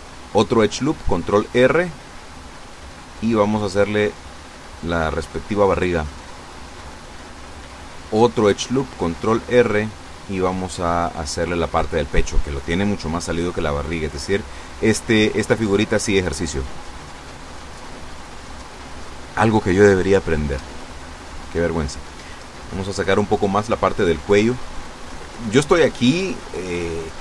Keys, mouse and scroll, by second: 0.0 b, 0.3-1.3 drag, 1.9 a, 2.3 b, 2.6 click, 3.7-5.8 drag, 7.3 ctrl+r, 7.8 ctrl+click, 9.7 click, 10.6 a, 10.9 b, 11.2 click, 12.4-14.7 drag, 18.9 a, 20.8 b, 21.0 click, 22.2-24.1 drag, 24.9 a, 25.3 b, 26.0-27.0 drag.